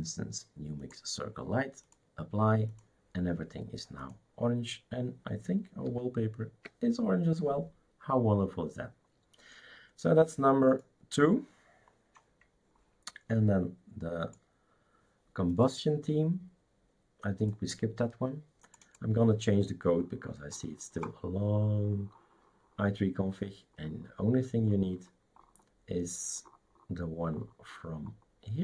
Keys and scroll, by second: 5.9 super+§.